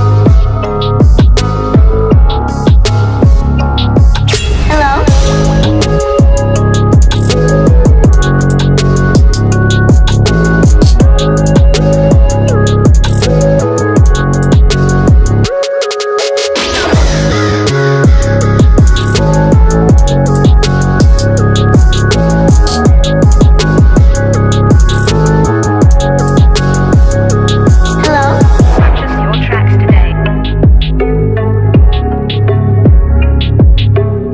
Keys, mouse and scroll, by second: 2.4 click, 6.3 ctrl+t, 6.4 right click, 6.7 click, 8.3 click, 10.4 click, 11.4 alt+scroll up 1, 12.0 typing, 12.2 scroll down 1, 12.4-15.8 drag, 16.7 right click, 16.8 click, 18.2 click, 19.5-27.2 drag, 27.5-34.3 drag.